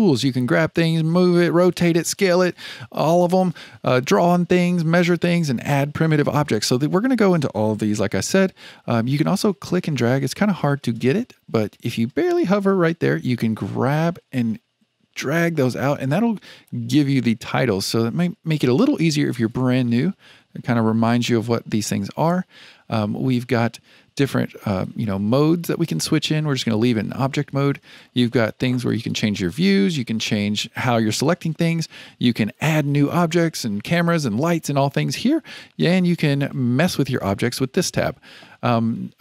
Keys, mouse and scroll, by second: 13.9-17.0 drag, 24.7-27.8 drag, 28.8 click, 29.9 click, 32.3 click, 36.0-37.6 drag.